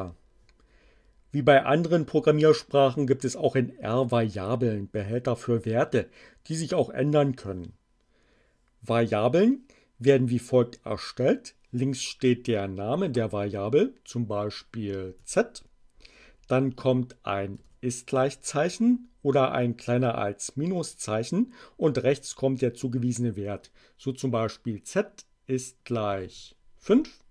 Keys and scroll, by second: 15.0 z, 17.4 shift+0, 26.2 5, 26.6 Return.